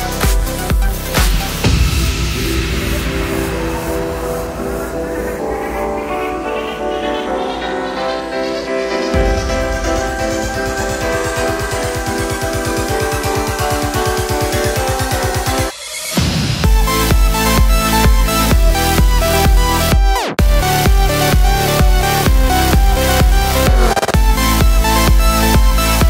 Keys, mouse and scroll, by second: 1.3 click, 1.6 click, 1.8 Tab, 1.9 scroll down 2, 2.0-3.2 middle drag, 3.4 click, 3.6 click, 4.2-5.1 middle drag, 5.1 click, 5.5 click, 6.5 click, 7.5 click, 8.0 scroll down 2, 8.2-9.5 middle drag, 9.3 scroll up 1, 9.5 click, 9.7 Tab, 10.2 click, 10.7-14.0 middle drag, 11.7 g, 13.2 Tab, 13.5 Tab, 14.0 alt+click, 14.8 ctrl+KP_Add, 15.8 middle click, 16.1 3, 16.2 click, 16.6 ctrl+KP_Add, 17.5-19.4 middle drag, 18.5 p, 19.4 click, 20.5 click, 21.2 click, 22.0 shift+click, 22.3 ctrl+p, 22.8 click, 23.0 Tab, 23.5 click, 24.0 click, 25.8 click.